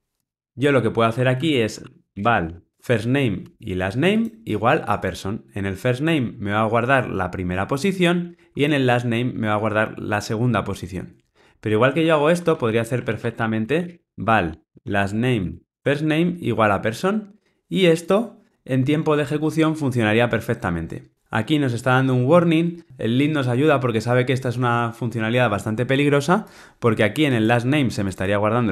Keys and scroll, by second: 3.4 Tab, 15.7 Tab.